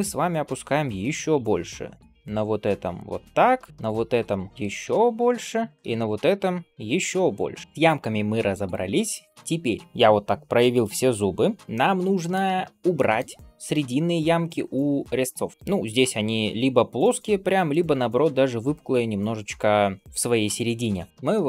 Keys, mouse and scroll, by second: 0.1 scroll up 1, 0.9 g, 3.7 shift+click, 4.2 click, 4.5 g, 5.8 shift+click, 6.6 middle click, 6.6 g, 7.5 scroll down 1, 7.6 scroll up 1, 11.6 middle click, 11.6 scroll up 2, 12.8 shift+middle click, 13.5-14.4 scroll up 1, 14.4-15.3 scroll down 1, 15.3 middle click, 15.3 scroll down 1, 15.5 scroll up 1, 21.1 middle click, 21.1-21.4 scroll down 1.